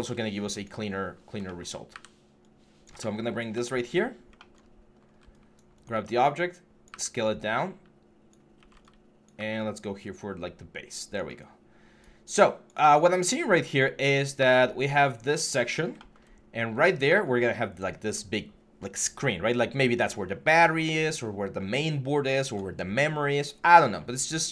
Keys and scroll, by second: 1.7 w, 3.7 4, 4.4 4, 6.7 typing, 8.4-9.1 typing, 11.2 typing, 12.6 w.